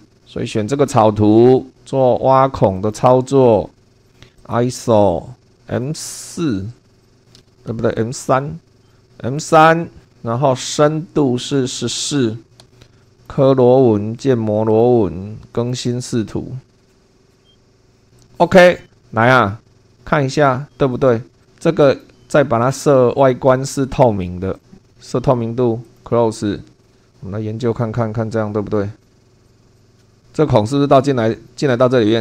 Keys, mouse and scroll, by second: 0.0 super+2, 2.7 click, 4.0 click, 4.4 click, 5.5 click, 7.0 click, 7.7 super+2, 8.8 click, 9.4 click, 11.6 click, 12.1 1, 12.6 4, 13.0 click, 14.2 click, 14.7 click, 15.6 click, 17.4 middle click, 18.2 click, 21.4 click, 21.8 right click, 23.2 click, 24.6 click, 24.9 8, 25.8 click, 26.8 click, 29.0 click, 29.4 click, 29.6 scroll down 1, 29.8 click, 30.0 shift+middle click.